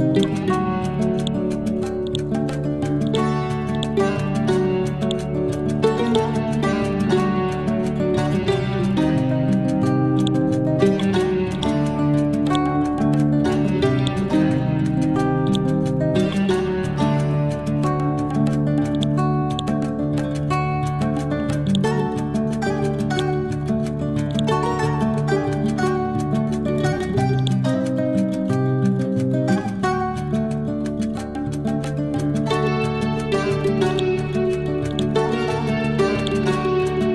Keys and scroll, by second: 4.2 e, 8.7 ctrl+Home, 12.8 e, 16.7 Up, 20.1 Right, 30.0 Right, 30.4 Left, 32.3 Up.